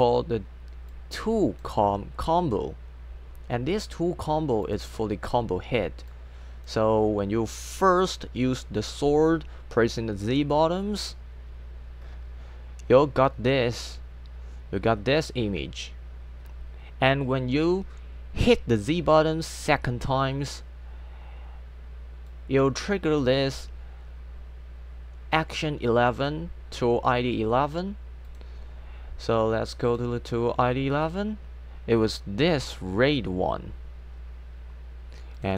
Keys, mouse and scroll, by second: 0.9 click, 4.7 click, 6.1 click, 22.3 click, 25.9 click, 28.3 click, 29.9 click, 31.1 click, 35.4 click.